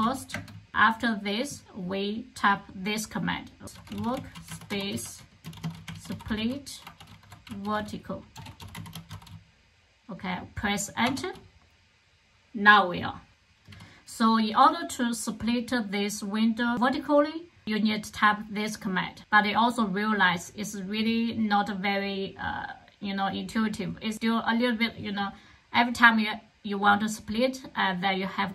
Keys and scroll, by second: 0.0-0.3 typing, 3.4-9.7 typing, 11.0 Return.